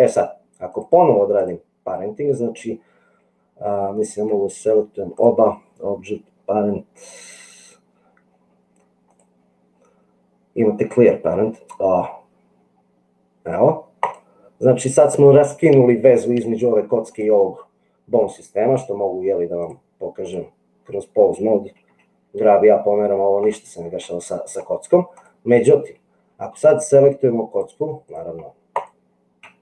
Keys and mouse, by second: 0.7-1.8 drag, 5.3-8.0 drag, 9.3-14.1 drag, 19.8 click, 22.0 g, 27.5 click.